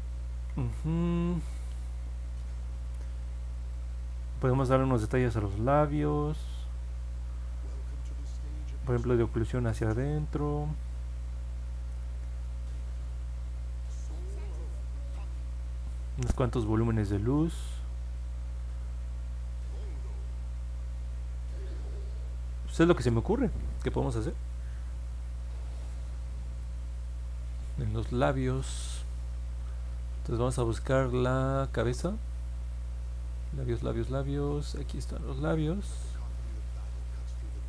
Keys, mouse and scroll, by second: 25.2-25.8 scroll up 4, 26.6 alt+middle click, 30.6 middle click, 31.6 click, 33.3-33.9 scroll down 2, 34.3 scroll up 1, 35.0 click, 37.3 click.